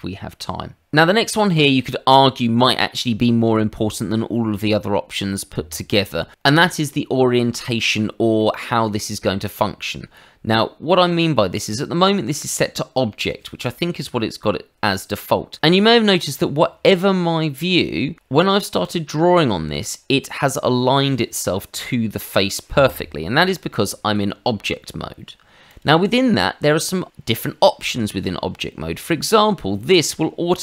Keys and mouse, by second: 8.4 middle click, 9.4 middle click, 15.5 middle click, 17.4 middle click, 18.2 click, 23.6 Escape, 25.7 click, 29.1 shift+middle click.